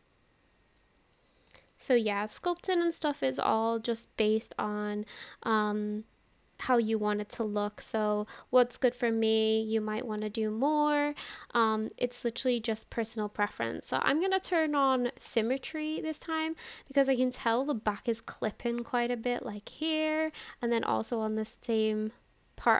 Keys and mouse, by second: 1.2 click, 1.3 middle click, 1.7 shift+middle click, 2.1 middle click, 2.7 shift+middle click, 3.5 middle click, 5.7 middle click, 6.7 click, 8.2 click, 9.3-10.8 middle drag, 11.2 middle click, 15.3 click, 16.0 shift+middle click, 16.6 middle click, 17.4 shift+middle click, 17.8-19.5 middle drag, 20.3 middle click, 21.3 middle click.